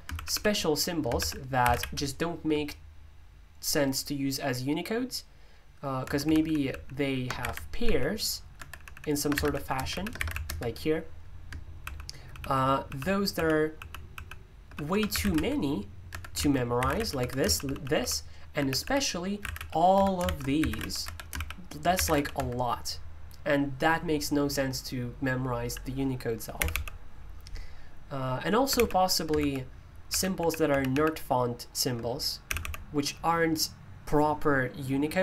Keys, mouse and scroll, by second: 0.9-2.2 typing, 6.0 Escape, 6.2-22.6 typing, 16.1 Escape, 26.5 g, 28.7-30.6 typing, 32.4 typing.